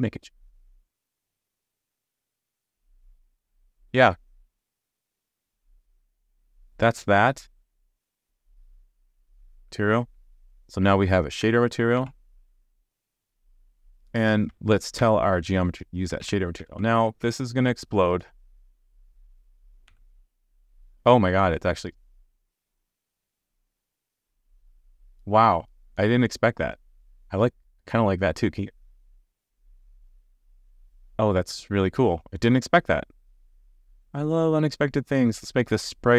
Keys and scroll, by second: 3.2 super+z, 15.0 super+c, 16.2 super+v, 16.6 super+s, 19.9 alt+super+j.